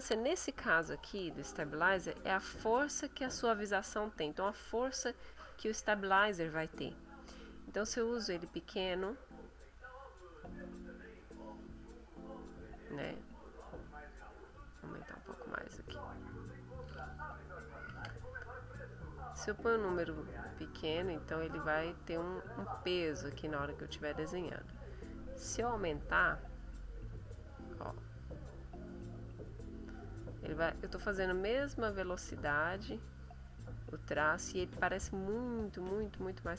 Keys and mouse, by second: 5.1 click, 8.5 middle click, 9.6 click, 11.9-14.3 drag, 14.8 click, 17.9 ctrl+z, 19.1-21.6 drag, 22.0-24.1 drag, 25.1 click, 26.4-30.0 drag, 30.5-33.4 drag, 34.2-36.5 drag.